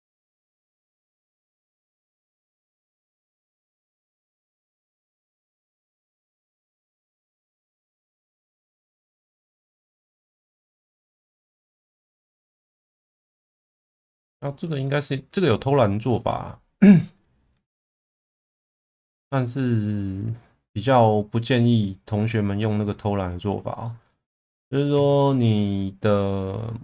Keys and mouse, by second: 0.0-1.0 middle drag, 1.2 middle click, 2.9 middle click, 4.2 click, 6.6 click, 9.4 click, 11.7 middle click, 12.6 middle click, 13.7 middle click, 14.5 shift+middle click, 14.9 middle click, 15.5 middle click, 17.2 click, 17.9 click, 19.1 click, 19.6 click, 20.8 click, 21.2 click, 23.1 click, 23.8 middle click, 24.6 click.